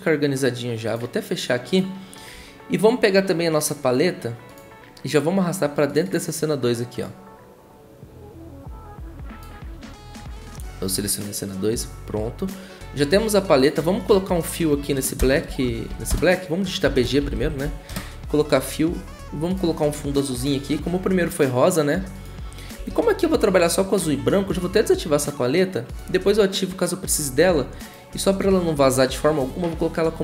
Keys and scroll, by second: 15.2 Return, 15.4 b, 15.9 g, 16.1 Return, 16.9-18.1 typing, 22.7 v.